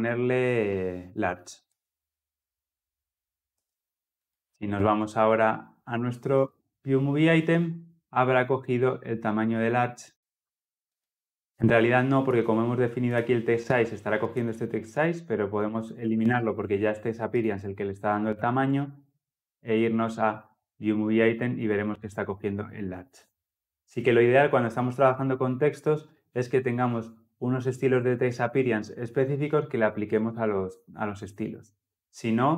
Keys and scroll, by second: 1.6 Return, 5.7 ctrl+s.